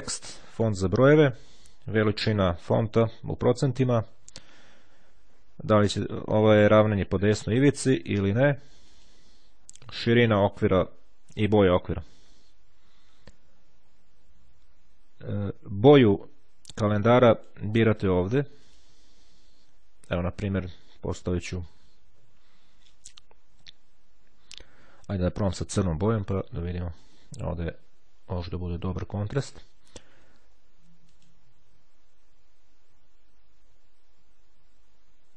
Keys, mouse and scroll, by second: 6.7-8.3 drag, 14.2-18.1 drag, 18.7 click, 24.0-25.9 drag, 31.1 click.